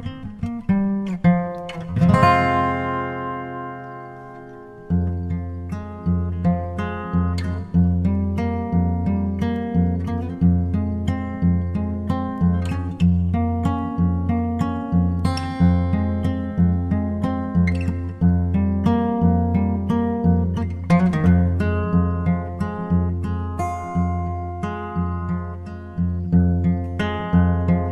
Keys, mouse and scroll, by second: 2.5 alt+a, 9.1-17.1 drag, 18.8-20.3 drag, 24.9-26.6 drag.